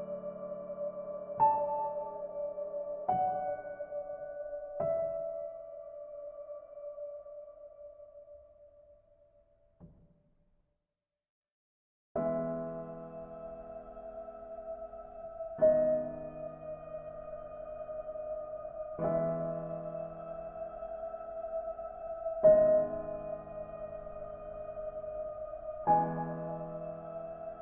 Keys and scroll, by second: 7.9 ctrl+z, 10.2 ctrl+g.